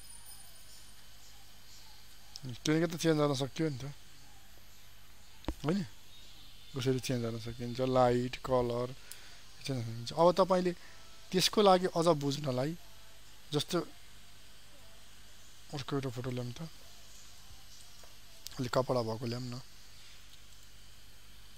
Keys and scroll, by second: 4.9 ctrl+d.